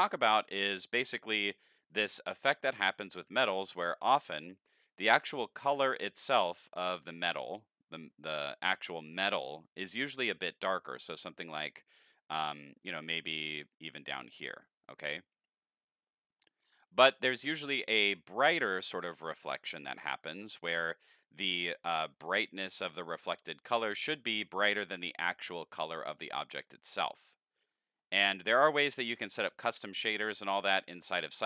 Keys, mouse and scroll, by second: 6.5 middle click, 10.1 click, 11.2 click, 12.8 drag, 13.7 click, 15.0-16.3 middle drag.